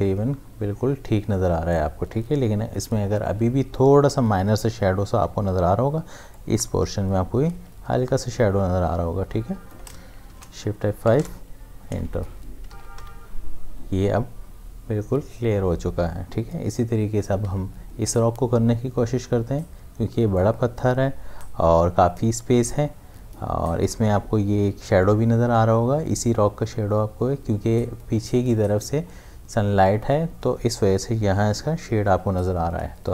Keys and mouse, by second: 4.9-5.7 typing, 6.3 click, 7.5 space, 10.3 shift+F5, 11.2 Return, 12.7 ctrl+d, 13.0 v, 17.4 m, 20.4-26.0 drag.